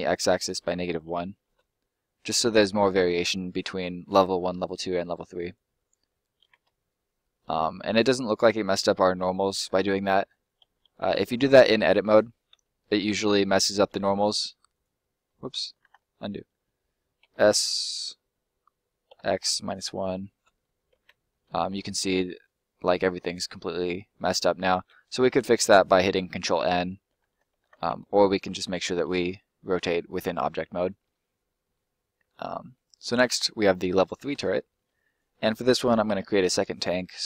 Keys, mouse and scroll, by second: 0.0 x, 0.9 1, 1.5 Return, 2.2 middle click, 5.5 click, 6.0 middle click, 6.7 middle click, 11.0 a, 12.5 x, 12.9 -, 13.9 1, 14.6 right click, 15.6 scroll down 2, 15.8 ctrl+z, 17.2 s, 19.0 x, 19.6 -, 19.8 1, 20.3 Return, 21.2 middle click, 21.5 scroll up 1, 21.8 middle click, 27.2 ctrl+z, 27.6 ctrl+z, 28.2 middle click, 28.9 middle click, 31.8 scroll up 1, 32.0 middle click, 32.3 scroll down 1, 32.5 middle click, 33.0 right click, 33.3 middle click, 34.6 middle click, 35.1 right click, 35.7 ctrl+right click, 36.0 ctrl+l.